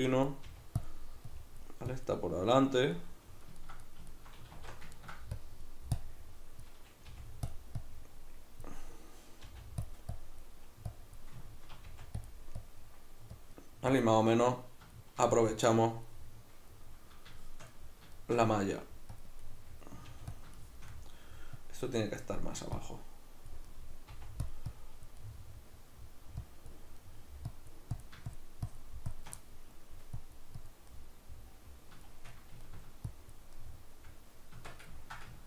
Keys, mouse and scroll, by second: 0.5 f, 2.9-5.4 middle drag, 4.5 alt+q, 5.4-7.5 drag, 7.0 f, 9.5 click, 9.5 f, 11.4-15.5 ctrl+middle drag, 11.9 f, 12.3 click, 15.5 click, 16.1-19.1 middle drag, 19.1 click, 19.4 middle click, 20.1 f, 20.3 click, 20.6-21.6 shift+middle drag, 21.6 click, 22.4 middle click, 22.8 click, 23.7 middle click, 24.1 f, 24.5 click, 25.2-26.4 middle drag, 26.4 click, 27.0 middle click, 27.5-29.4 drag, 29.4 middle click, 30.2 click, 30.9-33.1 middle drag, 33.1 click, 33.5-35.4 middle drag, 34.5 Tab.